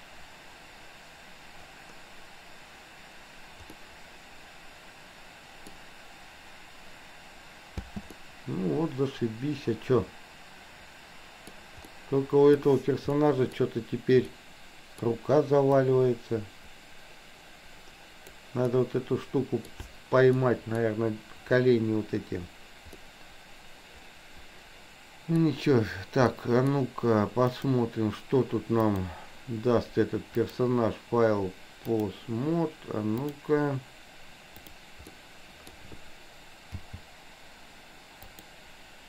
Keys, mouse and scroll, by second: 3.9-5.9 middle drag, 5.8 scroll down 1, 7.9 space, 8.1-11.5 middle drag, 8.1 scroll up 1, 11.9-12.6 middle drag, 13.3 middle click, 13.5 scroll down 1, 14.4-15.1 middle drag, 15.9-18.4 drag, 18.8-19.8 middle drag, 20.4 middle click, 23.0-25.4 middle drag, 26.4 middle drag, 27.6 click, 28.9 click, 30.4-32.1 drag, 33.1-33.6 drag, 34.6 click, 35.1-35.8 middle drag, 36.9 g.